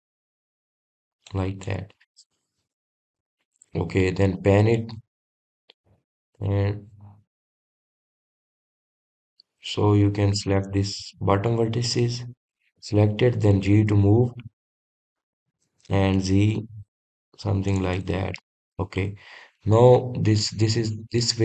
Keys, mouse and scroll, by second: 3.1 click, 3.8-8.6 middle drag, 8.6-9.1 scroll down 3, 9.1-10.0 scroll down 7, 10.0-12.3 middle drag, 12.3-13.4 scroll up 1, 13.4 click, 14.1 click, 15.2 g, 19.5 click, 19.9 middle click, 20.8 scroll up 1.